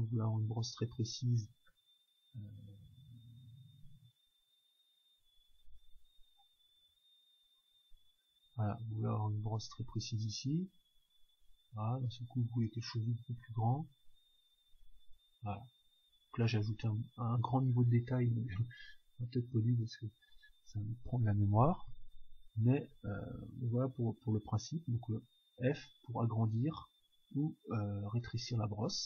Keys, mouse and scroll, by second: 0.2-2.8 drag, 2.8-4.4 middle drag, 4.4-8.4 drag, 8.8-10.7 drag, 12.2 f, 14.3-18.0 drag, 20.1-21.9 drag, 23.2-28.4 middle drag, 24.3-26.3 scroll up 1, 25.2 f, 28.5-29.0 drag.